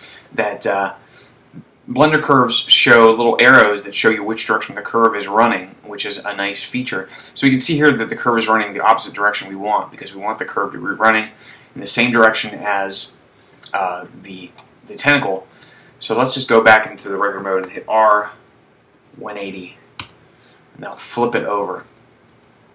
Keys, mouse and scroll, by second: 6.2-7.1 scroll down 2, 7.1-8.4 scroll down 1, 16.1 Tab, 18.2 r, 21.1 shift+middle click.